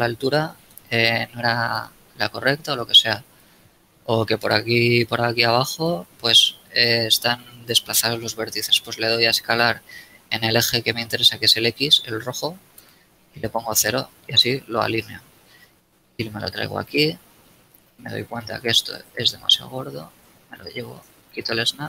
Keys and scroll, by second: 0.8 b, 3.4 a, 5.4 b, 9.4 s, 12.7 x, 13.4 0, 14.4 Return, 17.8 a, 18.7 b, 21.1 shift+Tab.